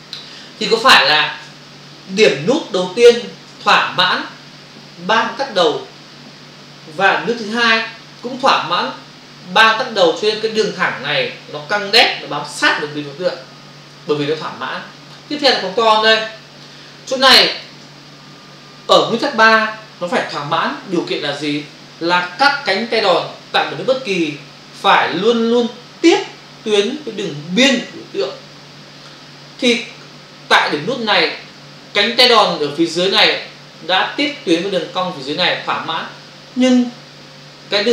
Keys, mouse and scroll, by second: 1.9 ctrl+-, 2.7 space, 7.2 space, 7.5 click, 7.6 space, 15.5 space, 15.7 ctrl+click, 16.9 click.